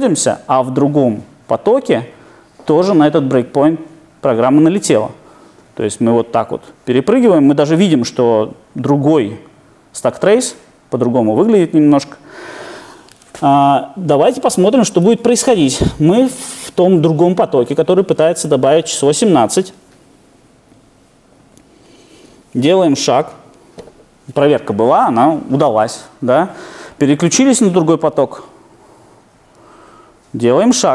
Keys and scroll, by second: 23.3 F8, 30.4 F8.